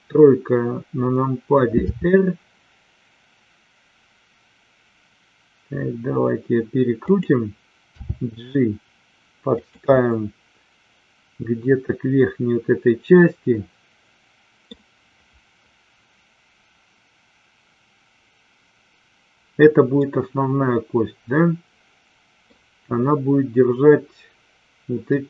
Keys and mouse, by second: 1.9 r, 7.9 g, 9.4 click, 9.9-14.6 middle drag, 20.0-22.4 middle drag.